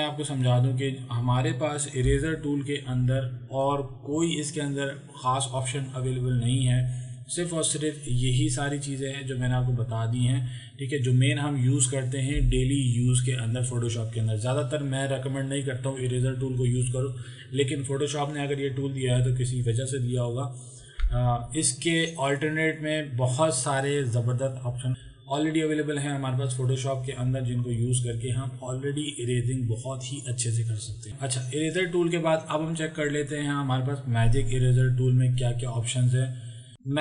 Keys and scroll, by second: 2.2 e.